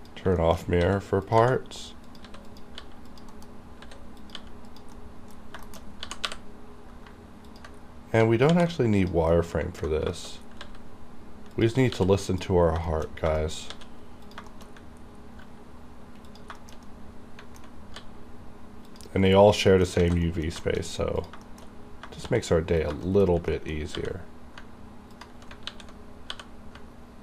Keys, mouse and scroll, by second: 0.5 shift+middle click, 0.7 shift+scroll up 2, 0.9-4.4 typing, 1.3 click, 2.2 click, 2.6 click, 3.2 click, 4.3 click, 4.8 click, 5.0 middle click, 5.4 scroll down 1, 5.7 shift+middle click, 6.0 shift+KP_1, 6.1 g, 7.1 y, 7.5 ctrl+click, 7.9 scroll down 1, 8.6 alt+v, 9.1 click, 9.1 click, 9.4 middle click, 10.1-10.5 scroll up 2, 10.2 shift+middle click, 10.7 s, 11.6 click, 12.0 r, 12.4 click, 12.7-13.4 scroll down 3, 13.0 shift+middle click, 13.4-13.8 shift+scroll up 1, 13.8 shift+middle click, 13.8 shift+d, 14.3 click, 14.6 shift+scroll down 1, 14.8 shift+scroll up 2, 15.5 g, 16.4 click, 16.7 shift+middle click, 17.0 middle click, 17.8 scroll up 1, 18.1 g, 19.0 click, 19.2 scroll down 1, 19.7 middle click, 19.8 middle click, 20.1 alt+a, 20.3 middle click, 20.7 shift+middle click, 20.9 shift+scroll up 1, 21.3 click, 21.5 shift+middle click, 22.3 shift+d, 22.9 click, 23.2 shift+middle click, 23.4 shift+scroll up 2, 23.6 middle click, 24.0 g, 24.7 g, 25.2 ctrl+click, 25.7 r.